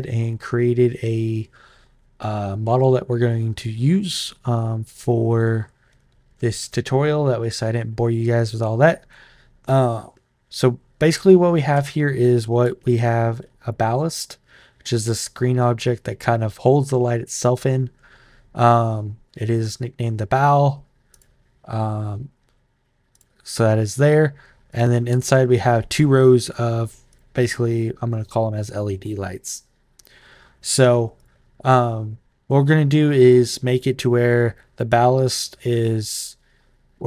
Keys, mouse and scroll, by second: 13.4 click, 20.9 click, 22.9 click, 23.6 click, 24.5 click, 26.2 click, 26.9 click, 31.0 click, 33.5 click, 35.6 click.